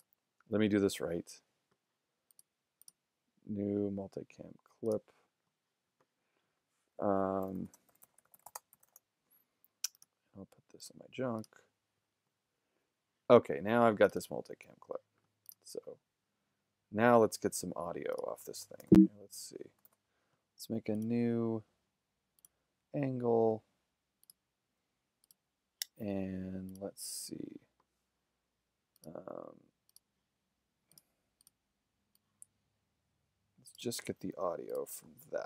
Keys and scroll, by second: 7.3-9.4 typing, 18.8 shift+g, 19.9 shift+f.